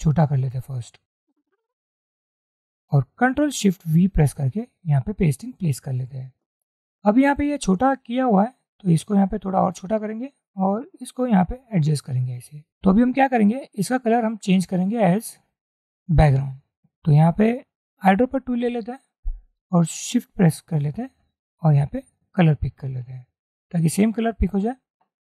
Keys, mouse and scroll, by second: 1.3 alt+shift+click, 4.1 ctrl+shift+v, 8.7 alt+shift+click, 10.7 alt+shift+click, 10.8-11.7 scroll down 1, 11.7-12.3 scroll down 1, 18.7 i, 22.2 shift+click.